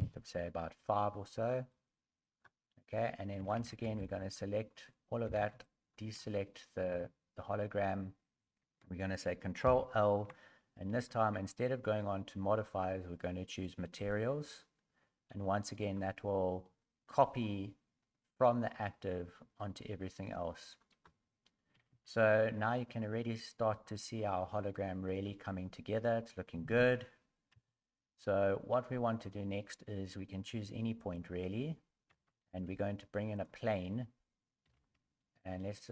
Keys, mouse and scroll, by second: 1.9 click, 3.4-5.2 typing, 4.8 scroll down 3, 6.5 scroll up 2, 7.1 scroll up 1, 9.6 ctrl+l, 22.4 scroll down 3, 22.4 a, 22.7 middle click, 23.7 middle click, 24.6 scroll up 4, 25.1 middle click, 26.6 KP_1, 27.5 KP_3.